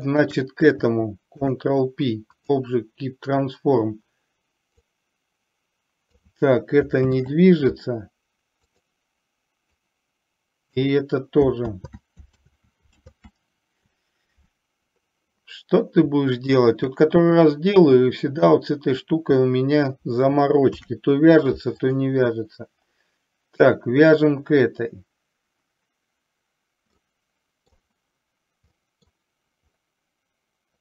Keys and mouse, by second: 0.2 shift+click, 5.0-6.3 drag, 7.2 ctrl+z, 8.9 click, 10.2 click, 11.8 ctrl+z, 13.2 ctrl+z, 20.8 ctrl+p, 27.0-27.8 middle drag, 28.9 middle click.